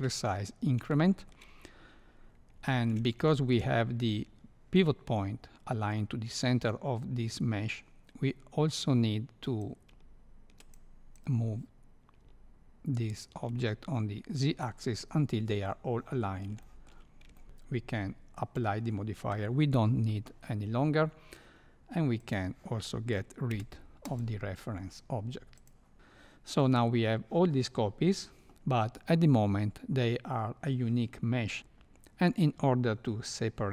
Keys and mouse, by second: 1.0 shift+middle click, 2.7 shift+middle drag, 3.4 shift+middle drag, 9.7 ctrl+click, 11.1-14.6 drag, 16.6-16.9 shift+middle drag, 17.3 shift+middle click, 18.4 click, 22.2 click, 23.5 x, 25.5 click.